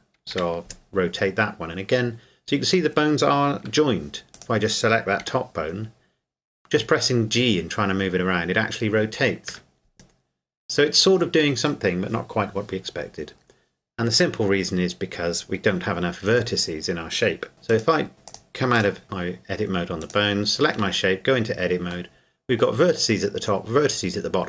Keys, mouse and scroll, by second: 0.3 r, 3.7 Escape, 4.3 right click, 5.2 g, 9.5 Escape, 17.5 Tab, 17.7 right click, 18.3 click, 20.0 right click, 20.8 Tab, 22.1 middle click.